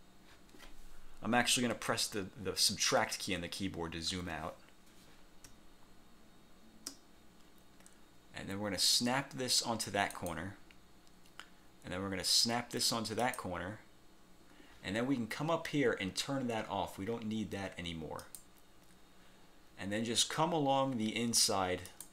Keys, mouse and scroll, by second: 1.8 -, 3.1 -, 4.2 -, 5.6 space, 10.2 click, 13.3 click, 18.4 click, 22.0 click.